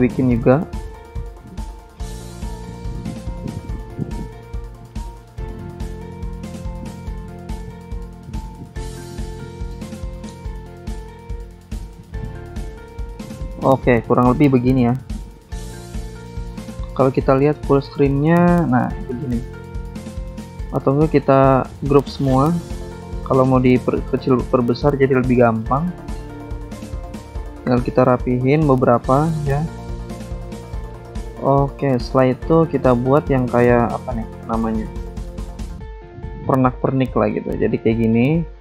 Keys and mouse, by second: 0.9 click, 1.6 alt+Tab, 2.9 alt+Tab, 4.2 click, 5.4 click, 7.3 click, 9.8 click, 11.9 click, 14.1 click, 16.8 click, 18.2 click, 19.9 click, 22.6 click, 25.2 click, 28.5 click, 28.8 ctrl+a, 30.6 ctrl+click, 31.1 ctrl+g, 32.0 ctrl+click, 34.9 click, 36.3 ctrl+click, 38.3 click.